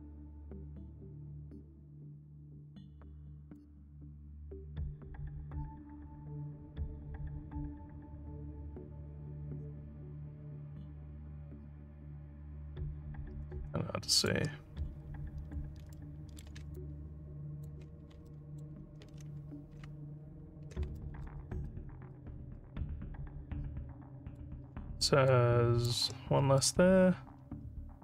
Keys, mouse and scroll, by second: 3.5-14.2 ctrl+drag, 15.9 alt+middle click, 16.7 ctrl+click, 18.3 alt+middle click, 19.1 alt+middle click, 21.0-24.3 alt+middle drag, 25.3 ctrl+click, 26.6-28.0 alt+middle drag.